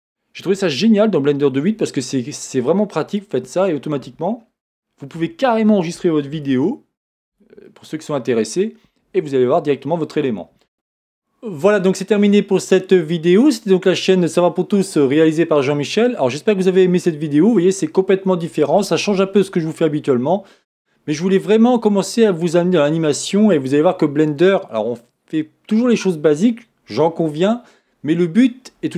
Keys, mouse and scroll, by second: 3.2 click, 3.8 scroll down 1, 4.4-5.7 scroll up 1, 6.6-28.9 shift+middle drag, 10.1-10.8 scroll up 1.